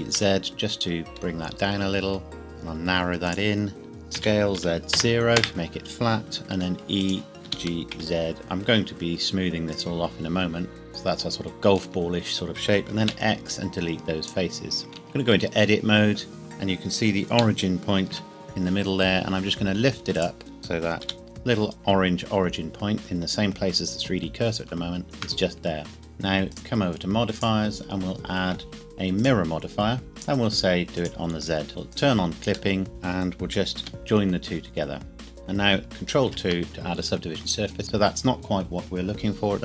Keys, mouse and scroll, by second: 0.2 z, 3.3 click, 4.2 s, 4.6 z, 4.9 KP_0, 5.4 KP_Enter, 6.5 e, 7.0 click, 7.5 g, 7.9 z, 9.7 click, 10.8 middle click, 11.8 Tab, 13.0 x, 14.2 click, 14.8 scroll up 1, 14.9 Tab, 15.4 a, 17.3 g, 18.1 z, 20.2 click, 20.6 KP_Decimal, 21.0 g, 21.2 z, 25.0 shift+click, 25.6-26.0 scroll down 1, 26.0 Tab, 26.5 click, 29.2 click, 32.7 shift+middle click, 32.9 Tab, 33.8 g, 33.9 z, 35.2 Tab, 36.2 ctrl+2, 37.2 scroll down 1, 37.8 Tab.